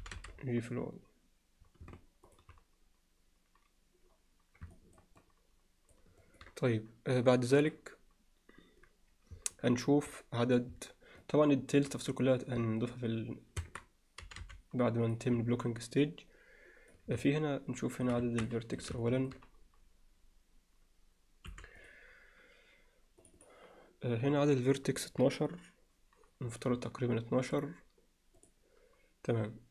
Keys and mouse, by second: 0.0 g, 4.8 ctrl+alt+middle click, 5.2 ctrl+alt+middle click, 6.2 ctrl+middle click, 11.2 alt+middle click, 13.6 Tab, 14.2 g, 15.6-16.9 alt+middle drag, 17.2-18.1 middle drag, 18.2 Tab, 18.5 alt+middle click, 19.0 ctrl+middle click, 21.5 4, 23.3 click, 23.4 click, 27.6-28.7 drag.